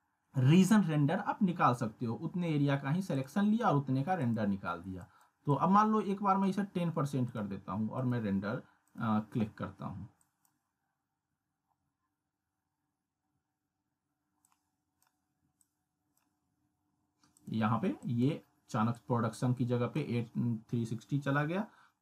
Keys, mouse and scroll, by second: 3.1-6.4 drag, 14.4-15.0 drag.